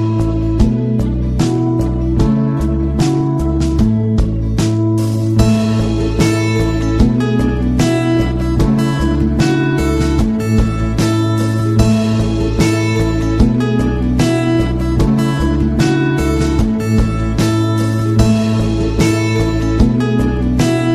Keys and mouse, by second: 0.8 middle click, 2.3-3.4 shift+right drag, 3.4 shift+middle click, 4.5 shift+right click, 5.6 shift+right click, 6.1 middle click, 7.2 ctrl+l, 10.1-11.3 drag, 11.6 shift+middle click, 12.0 Tab, 13.5 h, 14.2 right click, 15.1 h, 15.9 shift+middle drag, 16.2-16.6 middle drag, 17.4 middle click, 18.4 right click.